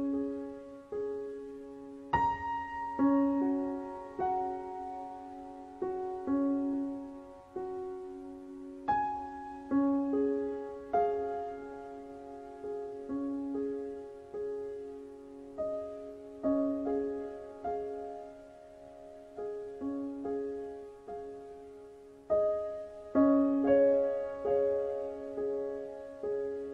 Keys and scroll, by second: 0.3 Return, 0.6 KP_4, 1.0 Return, 1.2 n.